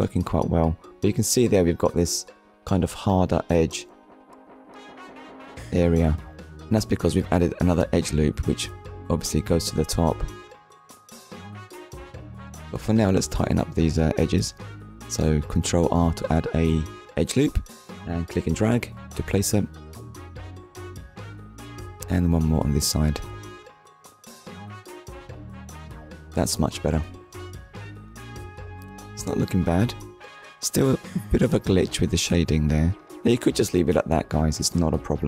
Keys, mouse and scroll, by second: 0.3 click, 0.6 middle click, 1.6 click, 2.0 Tab, 2.5 shift+middle click, 3.1 middle click, 4.6 Tab, 5.0 middle click, 6.5 Tab, 6.8 middle click, 7.7-8.1 scroll up 1, 8.3 shift+middle click, 9.7 ctrl+r, 10.1 click, 12.4 click, 13.3 middle click, 14.0 ctrl+r, 14.6 click, 16.8 click, 17.3 ctrl+r, 17.6 click, 20.0 click, 21.4 ctrl+r, 21.9 click, 24.2 click, 25.3 Tab, 25.9 scroll down 1, 26.4 click, 26.7 shift+middle click, 32.6 middle click.